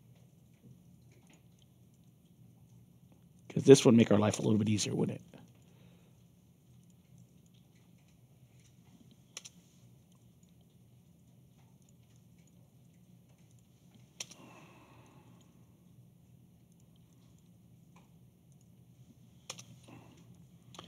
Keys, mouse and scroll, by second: 1.2 click, 1.5 alt+click, 3.3 click, 4.3 Return, 5.1 alt+click, 6.8 click, 7.1 alt+click, 8.5 click, 9.3 Return, 10.0 alt+click, 11.7 click, 12.1 alt+click, 13.4 click, 14.1 Return, 15.0 alt+click, 16.6 click, 17.0 alt+click, 18.4 click, 19.4 Return, 20.3-20.8 alt+drag.